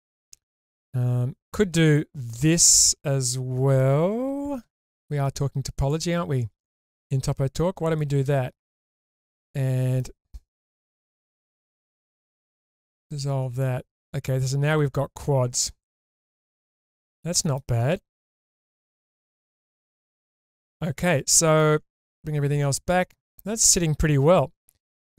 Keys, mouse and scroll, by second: 2.3-3.8 middle drag, 4.6 k, 8.8 click, 9.2 middle click, 10.8 2, 11.2 click, 11.8 shift+click, 13.2 ctrl+x, 13.6-17.6 middle drag, 19.0 scroll down 2, 19.3-21.6 middle drag, 22.5 /, 23.2-24.4 middle drag, 25.0 ctrl+s.